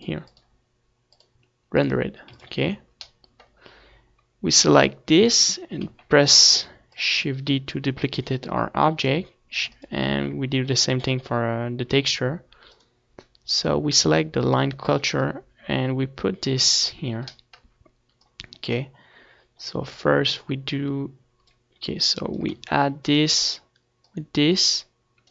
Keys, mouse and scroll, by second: 2.2 ctrl+s, 5.0-17.0 drag, 5.9 shift+d, 10.1 shift+d, 16.8-18.7 middle drag, 18.1-21.7 drag, 22.1-23.3 drag, 22.4 shift+d.